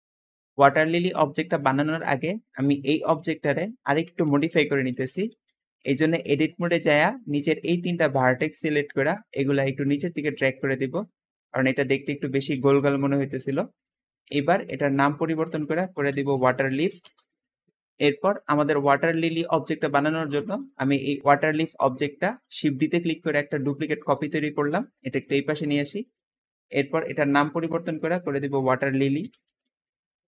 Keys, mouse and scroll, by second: 0.0-1.7 shift+middle drag, 1.9-2.4 shift+middle drag, 2.6 shift+middle drag, 3.5 KP_7, 3.6 Tab, 4.0 alt+z, 4.8 alt+a, 5.2 b, 5.9-6.4 drag, 6.6-7.4 scroll down 3, 7.6-8.3 scroll up 2, 8.8-11.5 drag, 11.6 Tab, 11.9-12.5 middle drag, 12.5 alt+z, 12.7-13.5 scroll up 1, 13.5-14.6 shift+middle drag, 14.6 shift+click, 14.7-17.8 shift+drag, 14.8-17.2 typing, 18.0-18.6 scroll down 3, 18.6-20.0 middle drag, 20.0 scroll up 1, 20.1-21.2 scroll down 2, 20.4-20.8 shift+middle drag, 21.2-22.1 shift+middle drag, 22.5 shift+d, 24.0 shift+drag, 25.1-25.4 scroll down 3, 25.4-26.8 shift+middle drag, 26.8 shift+click, 27.0-30.1 shift+drag, 28.3-29.6 typing.